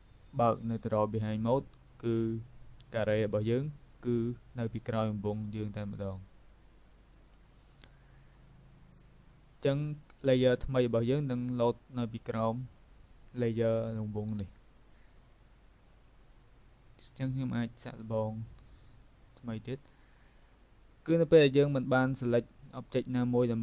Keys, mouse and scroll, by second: 5.4 click, 7.3 click, 15.2 click, 17.4 click, 20.5 click.